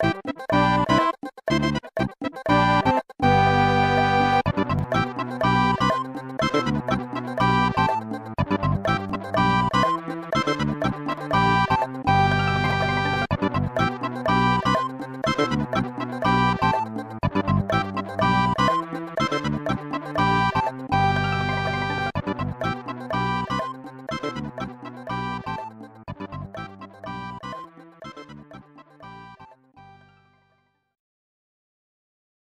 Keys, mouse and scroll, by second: 1.3 scroll up 1, 2.8 middle click, 3.8 scroll up 1, 4.3 ctrl+s, 4.5 click, 6.5 s, 7.8 click, 8.1 ctrl+z, 9.0 click, 9.8 click, 10.3 s, 12.6 scroll up 1, 14.2 scroll up 1, 21.5 click, 22.4-26.3 typing, 28.8 middle click, 29.5 ctrl+s, 29.8 click.